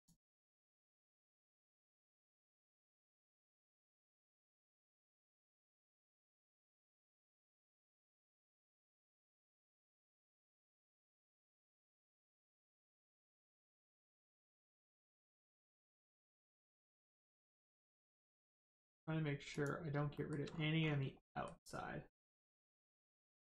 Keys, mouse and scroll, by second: 0.4 click, 19.5 click, 20.1 shift+middle click, 20.4 scroll up 1, 21.2 shift+middle click, 22.2 shift+click.